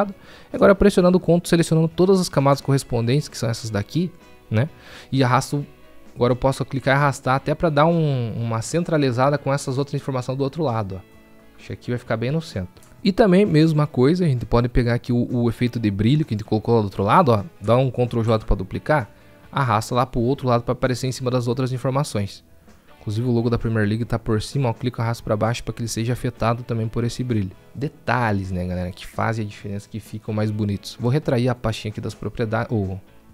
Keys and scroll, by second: 18.3 ctrl+j.